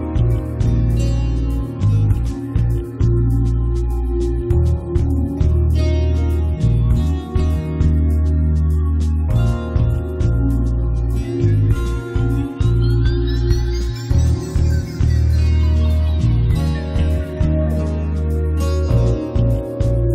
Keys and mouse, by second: 4.9 click, 5.2-7.3 middle drag, 7.3 click, 8.1 right click, 8.1 click, 8.3 middle click, 8.3 click, 9.2 right click, 9.7 click, 10.3 right click, 10.5-12.2 middle drag, 10.9 click, 10.9 right click, 12.1 click, 12.1 right click, 12.5 right click, 12.9 middle click, 13.3 click, 13.3 right click, 13.6 click, 14.0 middle click, 14.1 z, 14.6 z, 15.2 click, 15.6 g, 15.8 f, 16.4-19.1 drag, 19.1 middle click, 19.9-20.1 typing.